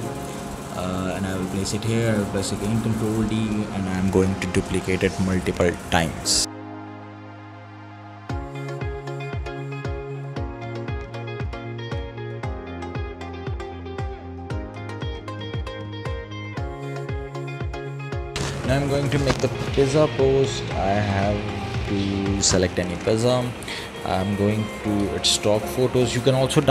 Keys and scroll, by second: 2.5 ctrl+d, 9.1 ctrl+d, 10.4 ctrl+d, 14.6 ctrl+z.